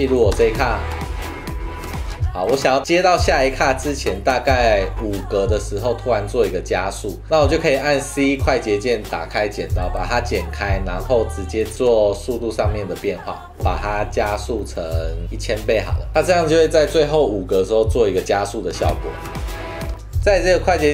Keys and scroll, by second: 0.4 space, 2.2 space, 4.1 Right, 4.3 Left, 5.5 c, 7.2 super+z, 8.1 c, 9.9 v, 11.9 super+3, 15.2 0, 16.2 space, 18.7 space.